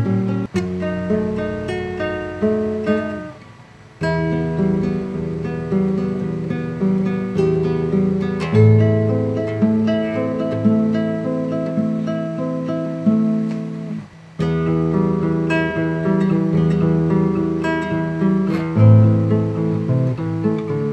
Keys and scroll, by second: 2.7 super+i.